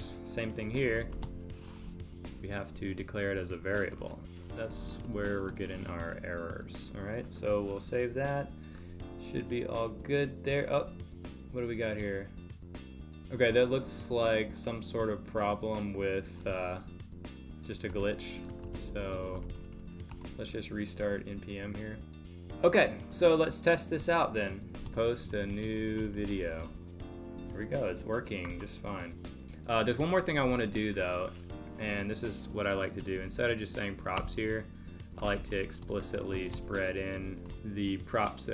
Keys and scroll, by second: 1.2 space, 5.5 space, 6.0 super+s, 19.1 space, 24.9 space, 25.6 space, 34.2 space, 35.8 space, 36.5 space.